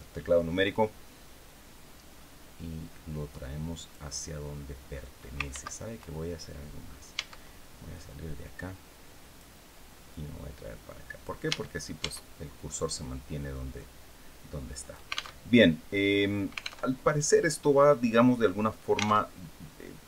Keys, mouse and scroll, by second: 1.1-3.8 drag, 5.2 ctrl+z, 6.8 Tab, 7.6-9.3 drag, 9.8-11.1 drag, 11.2 Tab, 13.4-15.0 drag, 15.1 alt+Tab, 16.6 alt+Tab, 18.9 alt+Tab.